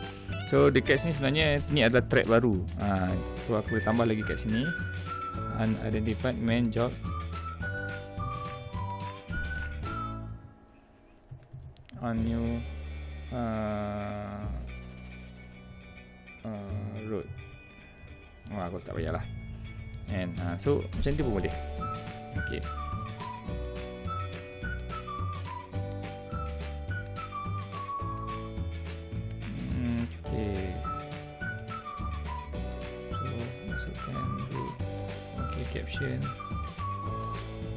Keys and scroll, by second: 8.2 Right, 9.4 Left, 10.2 Right, 11.5 space, 12.3 space, 17.9 space, 20.7 space.